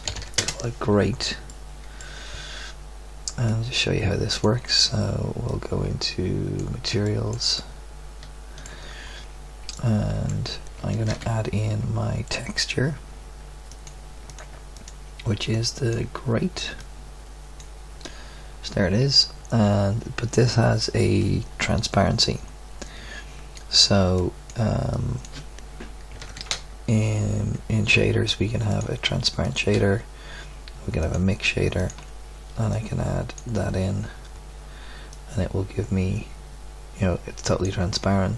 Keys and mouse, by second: 7.0 middle click, 7.7 middle click, 11.1 shift+a, 26.2 shift+a, 29.7 shift+a, 31.9-34.5 drag, 37.2-38.3 middle drag.